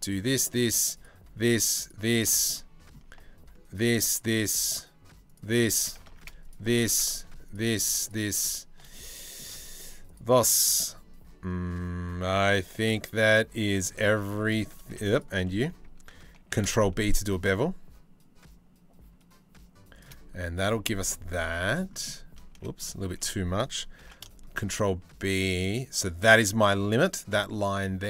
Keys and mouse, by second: 2.1 middle click, 5.7 ctrl+z, 8.5 middle click, 9.7 alt+shift+click, 11.9-13.1 drag, 13.3 shift+click, 16.0 ctrl+b, 20.7 click, 22.1 ctrl+z, 22.4 click, 23.6 ctrl+b, 27.1-28.0 drag.